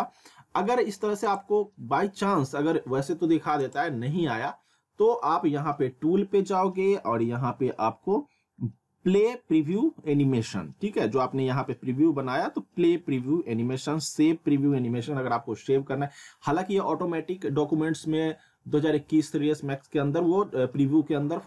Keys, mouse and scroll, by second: 1.3 click, 1.4 click, 3.6 click.